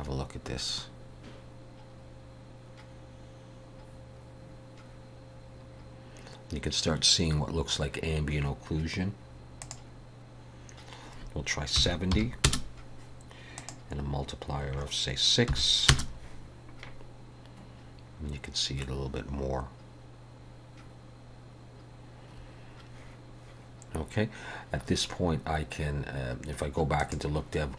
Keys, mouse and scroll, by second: 10.4 click, 14.3 click, 21.1 scroll down 1, 27.5 click.